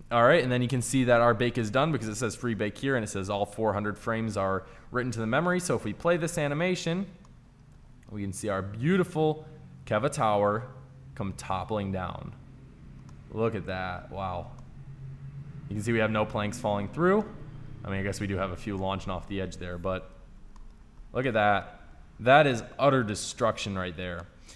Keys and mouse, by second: 5.4-7.5 drag, 7.5-11.5 middle drag, 13.0-16.6 middle drag.